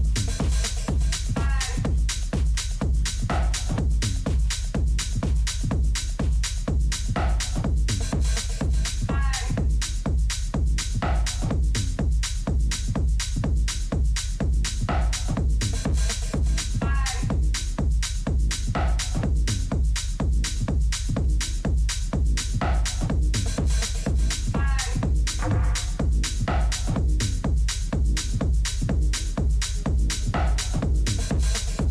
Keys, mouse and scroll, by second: 2.4-4.3 drag, 4.0 Tab, 5.0-10.7 middle drag, 6.7 a, 11.2 Tab, 11.8-13.6 middle drag, 17.8 middle click, 19.4-24.3 middle drag, 22.8 Tab, 23.8 Tab, 24.3 a, 24.8-29.7 middle drag, 31.1-31.9 middle drag.